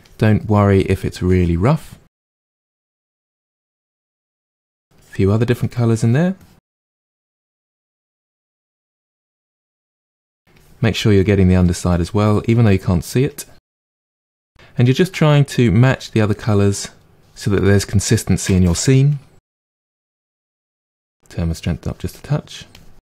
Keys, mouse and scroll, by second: 0.0 click, 0.3 middle click, 1.3 click, 1.7-3.2 middle drag, 3.2 click, 3.4 middle click, 3.8 click, 4.9-6.7 drag, 6.7 middle click, 7.3 click, 7.6 middle click, 8.0 click, 8.2 middle click, 8.8 click, 9.7 middle click, 10.5 click, 10.9 middle click, 11.8 click, 12.3 middle click, 13.2 click, 13.6 middle click, 14.0 click, 14.3-17.2 middle drag, 19.3 click, 19.5 middle click, 19.9-23.1 drag.